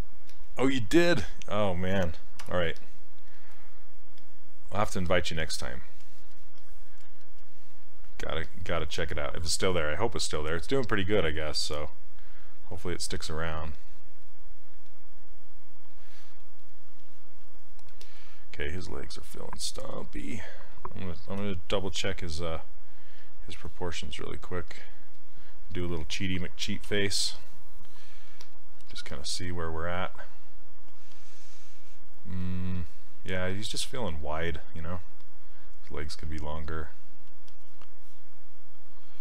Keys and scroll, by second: 2.5 w, 21.4 z, 26.9 z.